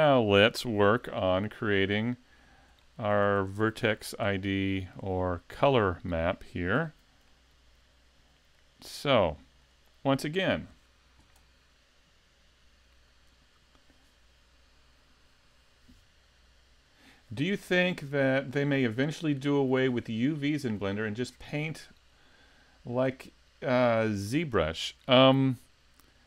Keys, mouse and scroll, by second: 0.9 KP_5, 1.6 scroll down 2, 2.8 shift+middle click, 3.7 super+s, 4.8 shift+middle click, 5.2 middle click, 6.9 a, 7.3 middle click, 9.6 right click.